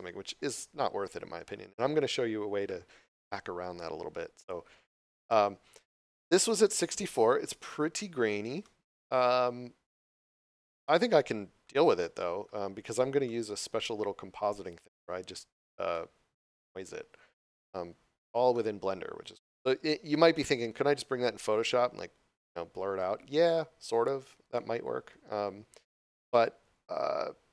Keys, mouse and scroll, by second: 5.3 click, 6.4 scroll up 1, 7.6 shift+middle click, 8.6 shift+middle click, 9.4 scroll down 1, 10.8 shift+middle click, 12.0 shift+middle click, 12.8 scroll down 1, 13.3 shift+middle click, 14.6 scroll up 1, 15.9 shift+middle click, 17.8 scroll down 1, 18.5 shift+middle click, 20.6 scroll up 1, 22.8 scroll down 1, 24.5 shift+middle click.